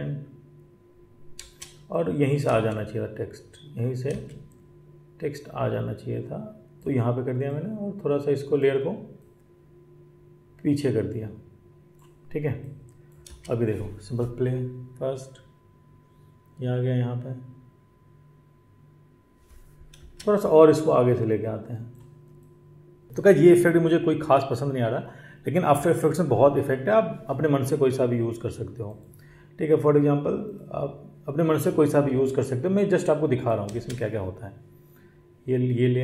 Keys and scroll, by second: 1.3 space, 13.2 space, 20.0 space, 33.7 space.